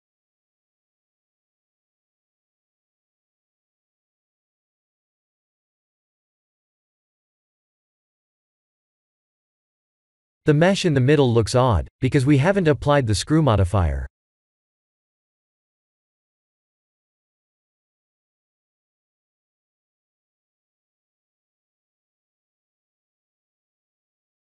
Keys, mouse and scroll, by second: 2.4 click, 5.9 click, 6.6 middle click, 6.8 middle click, 9.2 middle click, 9.3 middle click, 10.0-10.7 scroll down 4, 10.9 shift+middle click, 11.0 shift+middle click, 11.8-12.4 scroll up 1, 12.6 click, 13.1 middle click, 13.7 middle click, 15.1 click, 16.8 click, 19.0 ctrl+a, 19.8 click, 20.3 ctrl+a, 21.4 middle click, 23.6-24.4 scroll down 3.